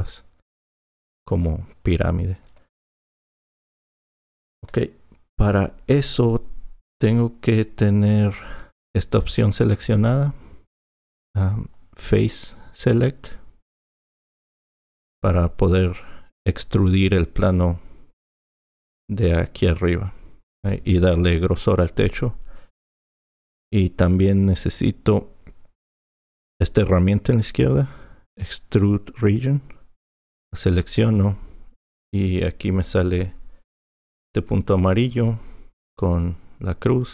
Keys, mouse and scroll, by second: 14.3-17.3 drag, 30.0-33.1 drag.